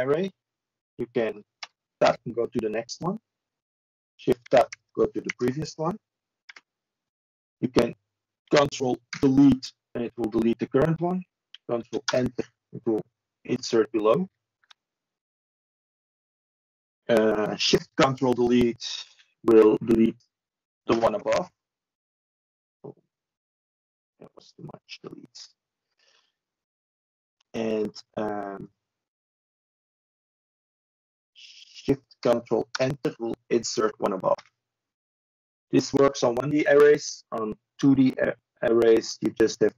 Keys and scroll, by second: 8.1 ctrl+a.